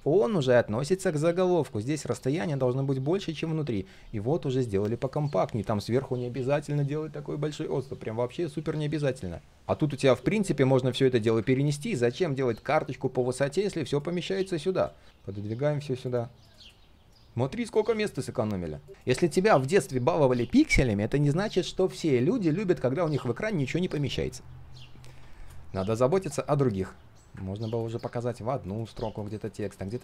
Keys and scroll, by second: 11.4 ctrl+z.